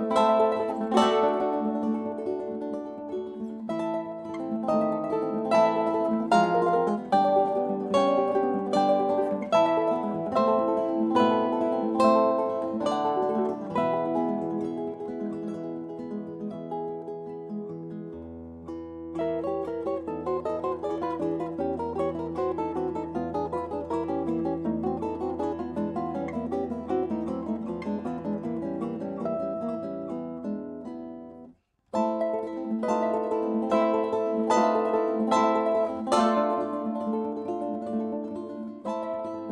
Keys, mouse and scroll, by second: 11.1 e, 14.2-16.5 drag, 19.6 middle click, 20.2-22.0 drag, 22.6 KP_5, 23.1 KP_1, 23.9 KP_3, 24.5 KP_5, 26.6-29.1 drag, 34.1 KP_1, 37.2-39.5 drag.